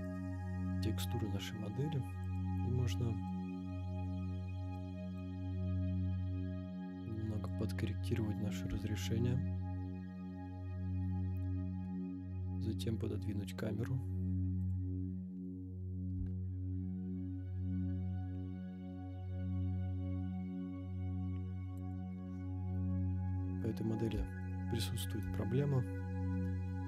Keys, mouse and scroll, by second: 0.0 click, 2.2 click, 3.2-4.9 drag, 5.2-7.6 drag, 7.9 scroll down 1, 8.3-8.7 scroll up 2, 11.7 g, 11.9 y, 14.7 click, 14.8 scroll down 1, 15.5 scroll up 1, 16.1 g, 21.9 click, 22.9-23.7 middle drag, 24.4-25.1 shift+middle drag, 25.5-26.5 scroll up 5, 26.7-26.8 shift+middle drag.